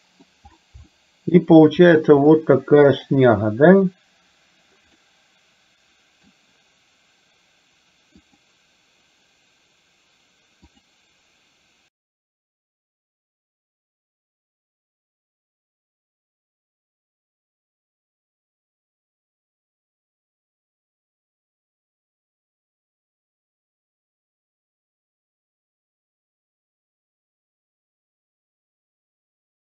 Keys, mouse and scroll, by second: 1.1 shift+middle click, 2.3 middle click, 3.3 click, 5.0-6.5 middle drag, 8.2 click.